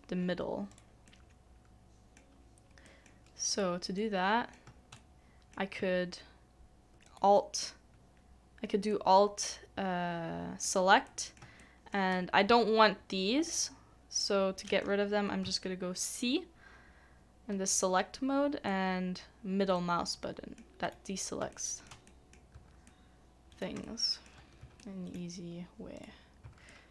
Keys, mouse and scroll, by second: 1.1 middle click, 4.9 shift+middle click, 7.0 alt+click, 8.9 middle click, 11.6 shift+middle click, 18.6 c, 18.7 middle click, 20.8 middle click, 21.5 shift+middle click, 22.0 middle click, 22.8 c, 22.8 middle click, 23.5 right click, 23.8 shift+middle click, 24.8 c, 24.8 middle click, 25.0 right click, 26.6 c, 26.7 middle click.